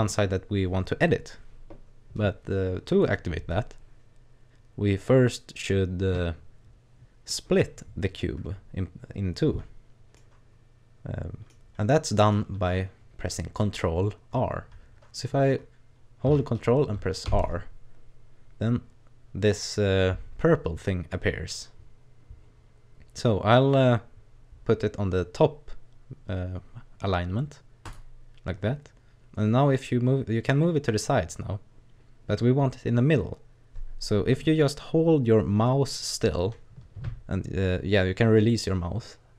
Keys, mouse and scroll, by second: 10.2 middle click, 12.0 middle click, 17.3 ctrl+r.